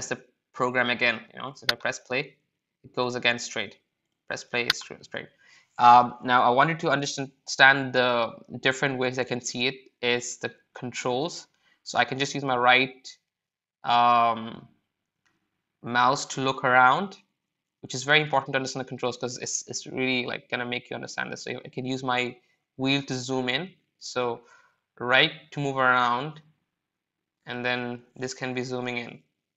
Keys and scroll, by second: 12.4 w, 13.1 w.